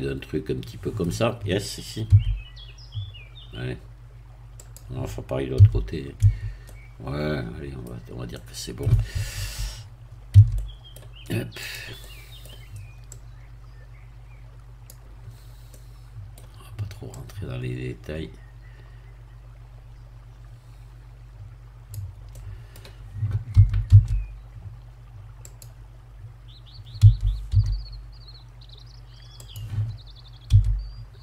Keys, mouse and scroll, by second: 2.0 s, 4.5 click, 5.5 a, 6.6 Tab, 6.6-7.9 middle drag, 7.9-8.3 scroll down 1, 8.3 middle click, 10.3 Tab, 10.5 middle click, 11.6 click, 11.9 middle click, 13.1-15.0 drag, 15.3-15.6 scroll up 2, 15.7 middle click, 17.1-22.1 drag, 22.3 middle click, 23.5 e, 23.8 s, 25.5 click, 27.0 e, 27.5 y, 29.4-30.5 drag, 30.5 s.